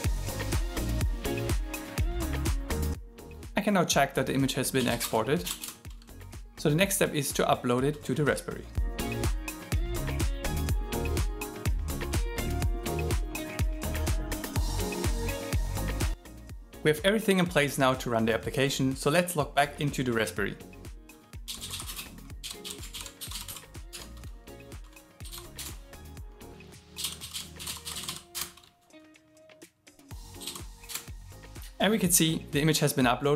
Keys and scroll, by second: 11.4 alt+l, 13.5-15.2 typing, 22.9 alt+l.